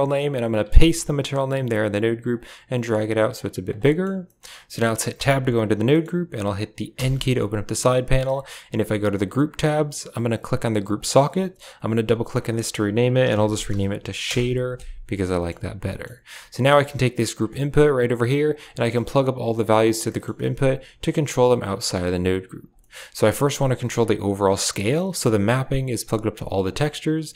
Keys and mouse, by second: 0.1 click, 2.2-3.2 drag, 3.2 click, 3.7 middle click, 4.1 middle click, 4.6 click, 5.0 Tab, 5.8 click, 6.8 n, 8.1 n, 9.2 drag, 10.7-14.2 drag, 15.2 middle drag, 15.7 middle click, 16.5 a, 16.6 right click, 16.7 g, 18.1 click, 18.7 shift+middle click, 19.1 ctrl+middle click, 19.9 shift+middle click, 20.3 Tab, 21.8 Tab, 22.7 middle drag, 25.5 click.